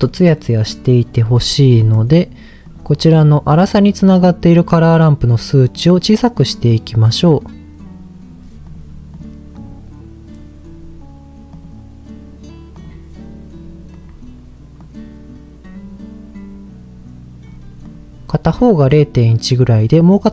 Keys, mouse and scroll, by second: 1.4-1.8 scroll up 2, 1.8 middle click, 2.6 click, 4.6 click, 8.6 drag, 9.1 click, 9.6 click, 13.9 click, 17.8 click, 18.9-20.1 middle drag.